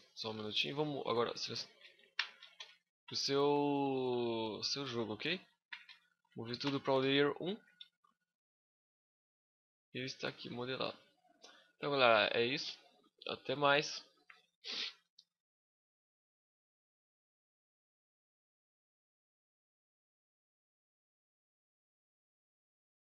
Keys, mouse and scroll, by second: 0.2 click, 0.9 a, 1.9 m, 7.7 scroll up 2, 7.8 middle click, 10.7 scroll up 1, 12.8 middle click.